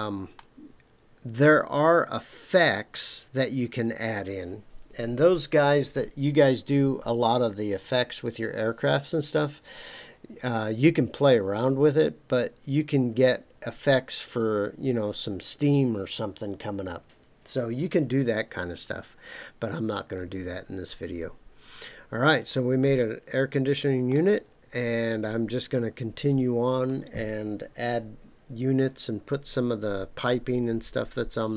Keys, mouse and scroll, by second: 0.3-2.6 middle drag, 18.9-19.2 scroll down 2, 19.9-24.1 middle drag, 24.4 scroll down 2.